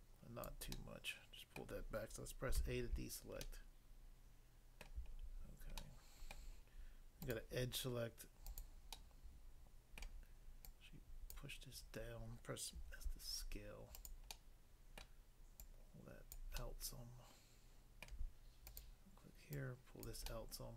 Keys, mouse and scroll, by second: 0.5 click, 0.7 middle click, 1.6 middle click, 2.6 a, 2.9 scroll down 1, 3.5 middle click, 4.8 middle click, 5.1 scroll up 1, 5.8 middle click, 6.3 middle click, 6.3 scroll down 1, 7.2 click, 8.5 click, 9.0 middle click, 10.0 middle click, 10.7 click, 11.3 click, 12.7 s, 14.0 click, 14.3 middle click, 15.0 middle click, 15.6 click, 16.3 click, 16.6 middle click, 18.1 middle click, 18.6 click, 18.8 click, 19.5 click, 20.1 click, 20.2 middle click.